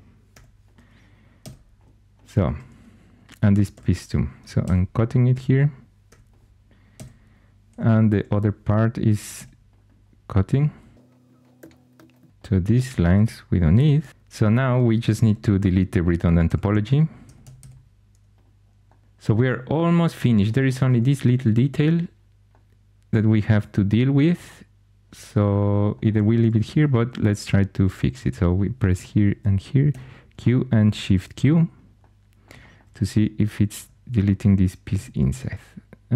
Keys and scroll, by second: 0.2 4, 1.3 x, 3.7 2, 4.5 c, 6.0-8.0 typing, 9.3 c, 11.0-12.4 typing, 13.7 x, 15.2 4, 16.4-18.0 typing, 29.8 q, 30.8 shift+q, 33.7 4, 34.9 x.